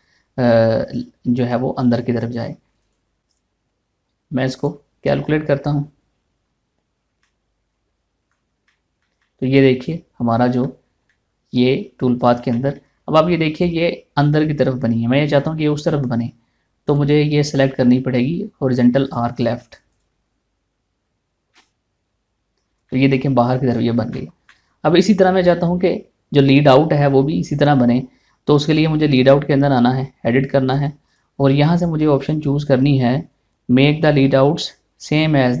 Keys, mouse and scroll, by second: 3.4 click, 7.8-9.3 middle drag, 9.3-11.7 shift+middle drag, 12.3 scroll up 1, 12.9 scroll down 1, 13.1 middle click, 13.6 scroll up 1, 17.4 click, 23.4 middle click, 24.3 scroll down 1, 24.7 shift+middle click, 27.8 middle click, 29.3 click.